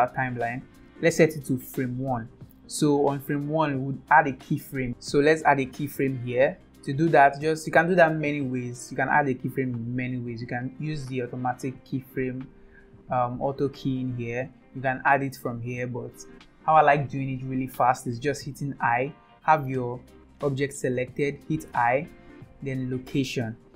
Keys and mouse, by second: 0.8 Right, 14.7 n, 15.7 n, 21.7 i.